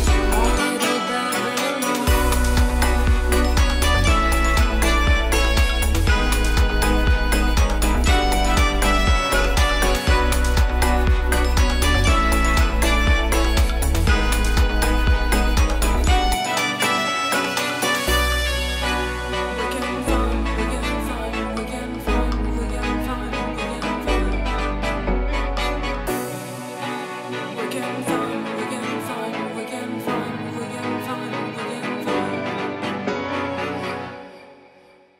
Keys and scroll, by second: 0.4 super+z, 2.8 space, 5.4 super+z, 6.8 super+z, 8.7 [, 12.1 super+z, 12.8 super+z, 15.5 space, 16.6 space, 28.5 super+z, 31.1 super+z, 32.1 super+z, 32.8 super+z, 33.0 space, 33.6 super+z, 34.7 super+s.